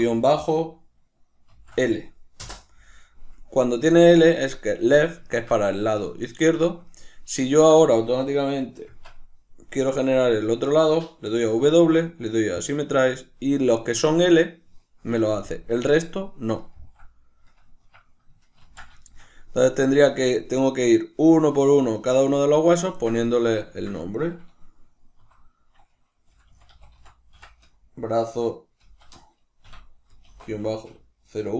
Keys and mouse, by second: 8.8 Tab, 18.5 ctrl+z, 18.9 shift+middle click, 19.7 right click, 22.9-31.5 ctrl+shift+middle drag, 25.1 F2.